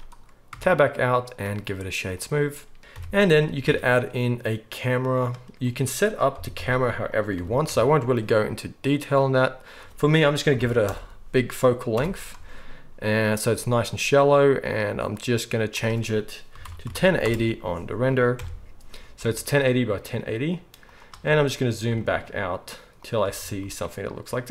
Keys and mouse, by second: 0.5 Tab, 1.2-2.2 right drag, 2.2-2.9 drag, 2.9-3.7 right drag, 2.9 KP_1, 3.7-5.6 drag, 3.7 shift+a, 5.6 middle drag, 5.7 drag, 5.7-20.9 middle drag, 6.3 g, 7.3 g, 8.9-15.0 drag, 8.9-15.0 right drag, 15.7-19.1 drag, 15.7-19.1 right drag, 18.3 KP_0, 19.1 g, 20.2 click, 20.2 right click, 20.9-24.5 right drag, 21.9 g, 23.2 g.